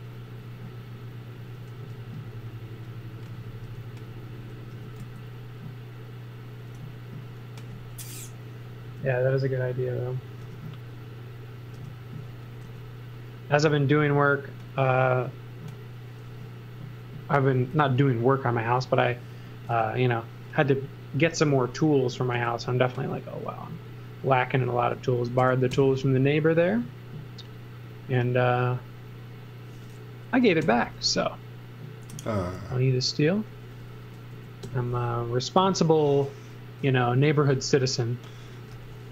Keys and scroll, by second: 1.8 e, 3.7 space, 4.7 m, 6.8 e, 8.9 space, 10.4 m, 11.7 space, 12.7 l, 16.3 e, 19.7 l, 21.4 e, 22.3 space, 25.4 b, 25.7 Return, 30.3 b, 30.6 Return, 34.3 8, 34.6 Return, 37.2-39.1 typing.